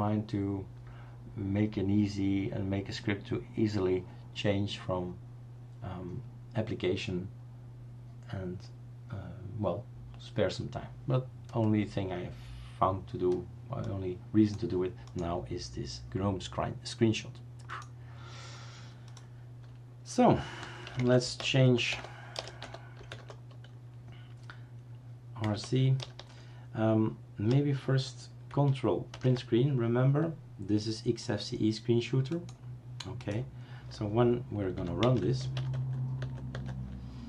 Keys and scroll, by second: 20.8-23.6 typing, 25.3-27.4 typing, 29.3 ctrl+Print, 34.7-36.0 typing, 36.2 Tab, 36.5-37.2 Tab.